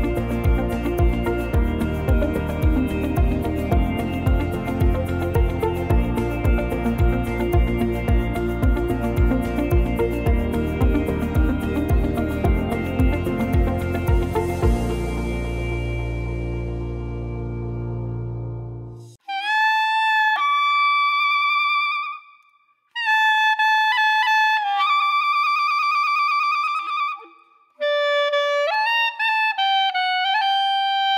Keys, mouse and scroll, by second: 0.8 middle click, 0.8 scroll down 1, 1.4 scroll down 1, 1.6 click, 2.0 middle click, 2.3 click, 2.8 middle click, 3.4 click, 4.8 click, 5.2 scroll up 1, 5.7 click, 6.6 scroll up 1, 6.9 shift+middle click, 8.6 shift+a, 11.6 s, 11.7-13.7 scroll down 4, 13.7 s, 16.0 click, 17.1-18.0 scroll up 4, 17.5 shift+middle click, 18.5 click, 20.6 scroll down 1, 20.8-21.2 scroll up 1, 21.2 shift+middle click, 22.3 s, 27.2 click, 27.9 click, 28.5 click, 29.1 click.